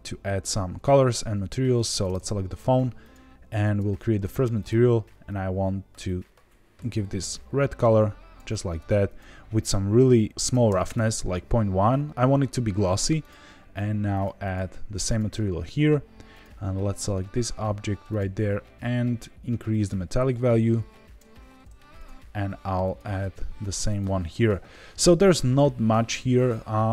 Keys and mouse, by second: 1.7 click, 3.8 drag, 4.5 click, 9.0-11.3 drag, 13.1 click, 14.2 click, 14.4 click, 16.4 click, 18.1-18.4 drag, 19.6-21.2 drag, 21.9 click, 22.9-24.0 drag.